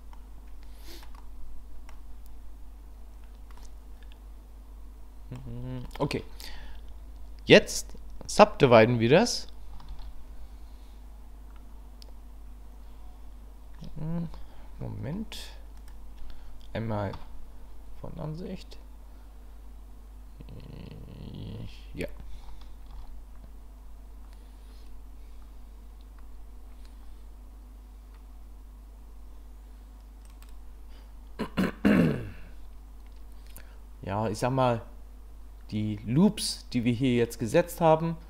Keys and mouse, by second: 0.2 click, 1.3 click, 3.6-5.4 drag, 6.0 shift+middle click, 10.0 ctrl+r, 17.1 KP_1, 22.9 ctrl+r.